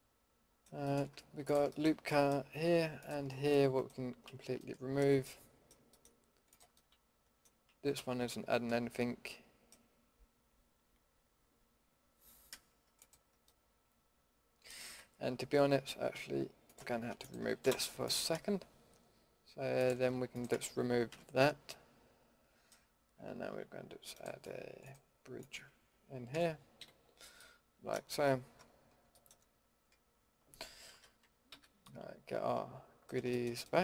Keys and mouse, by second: 1.4-2.4 middle drag, 4.2 ctrl+x, 4.6 middle drag, 6.5-7.1 middle drag, 7.2-7.6 middle drag, 7.9 ctrl+x, 8.2 middle click, 8.4 middle click, 13.4-14.0 middle drag, 14.1-14.8 middle drag, 14.8 a, 17.6 Delete, 21.1 ctrl+x, 21.9-22.2 middle drag, 22.3 middle click, 26.3 f, 26.8 a, 27.0-27.4 middle drag, 28.9 Tab, 29.1 click, 29.9 Tab, 30.2 click, 30.9 alt+h, 31.5 a.